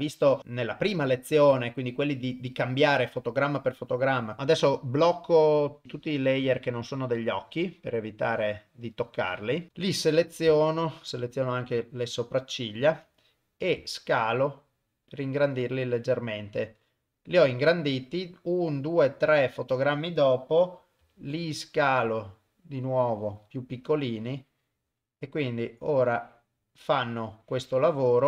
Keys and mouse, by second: 5.8 click, 7.4-7.9 drag, 9.1 click, 9.7 ctrl+right click, 10.7-11.1 ctrl+right drag, 11.7 ctrl+right click, 13.8 s, 18.2-19.6 drag, 21.0 s, 24.0-28.2 drag.